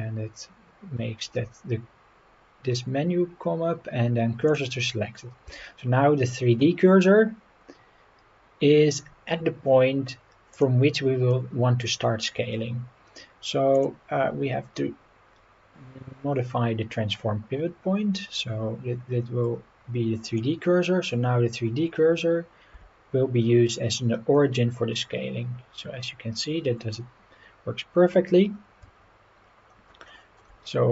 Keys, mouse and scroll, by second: 5.5 Tab, 7.3 scroll up 2, 7.7-8.0 scroll down 2, 10.5 click, 11.3 scroll down 1, 11.9-12.5 scroll up 2, 13.7-20.4 drag, 22.7 s, 28.8 Escape, 29.3 scroll down 3, 30.1 shift+middle click.